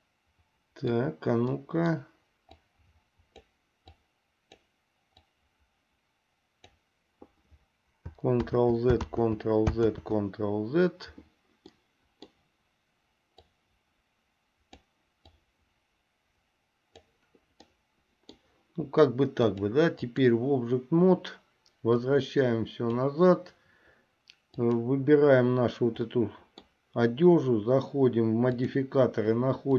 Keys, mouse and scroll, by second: 1.8 middle click, 2.8-3.8 drag, 4.2 click, 5.5-7.0 drag, 8.6 ctrl+z, 9.4 ctrl+z, 10.2 ctrl+z, 11.9 middle click, 13.6-15.1 drag, 15.6-17.3 drag, 18.0 middle click, 19.6 click, 22.1-23.2 drag, 24.7 click, 26.3 middle click.